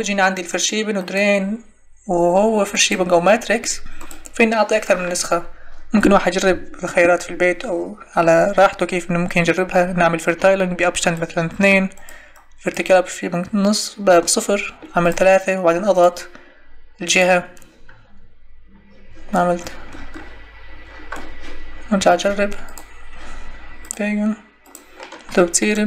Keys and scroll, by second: 11.5 3.